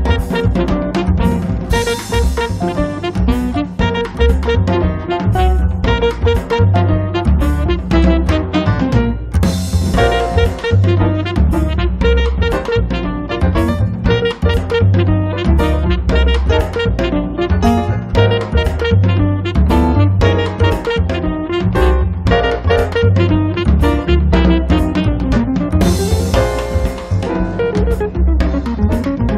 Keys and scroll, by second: 0.1 r, 2.4 space, 5.8 m, 10.2 space, 10.8 r, 14.3 p, 16.8 f, 18.0 5, 18.3 Return, 19.2 p, 19.9 space, 21.1 p, 22.7 space, 25.9 r.